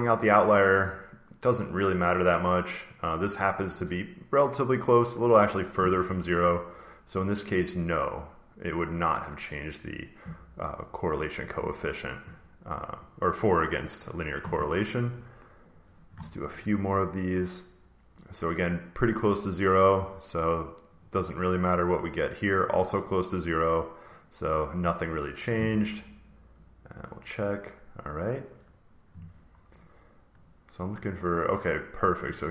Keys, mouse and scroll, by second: 1.5 click, 4.9 click, 8.1 click, 13.9 click, 15.6 click, 16.9 click, 20.9 click, 24.1 click, 26.5 click, 28.3 click, 29.7 click, 30.4 click.